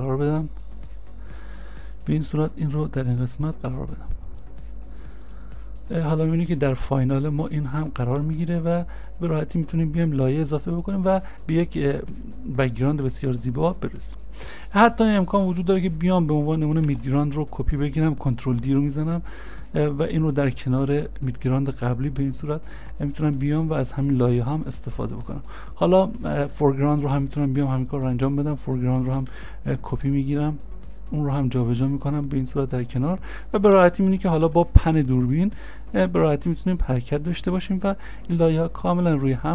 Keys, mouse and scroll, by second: 0.0 s, 8.2 s, 9.8 c, 16.3 c, 16.9 ctrl+d, 20.7 shift+click, 26.7 shift+click, 26.7 scroll up 1, 30.0 ctrl+d.